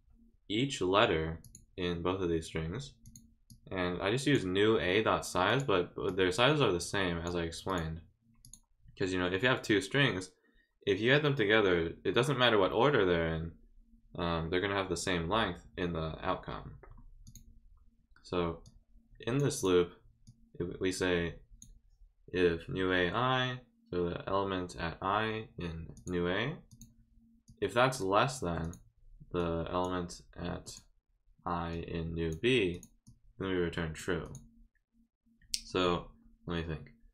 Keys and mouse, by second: 1.4 click, 3.0 click, 3.5 click, 5.5 click, 6.1-7.2 drag, 7.7 click, 8.4 click, 17.2 click, 18.6 click, 19.6 click, 20.2-21.6 drag, 25.9 click, 26.7 click, 27.4 click, 28.6 click, 29.4 click, 30.6 click, 31.7 click, 32.7 click, 33.0 click, 34.2 click.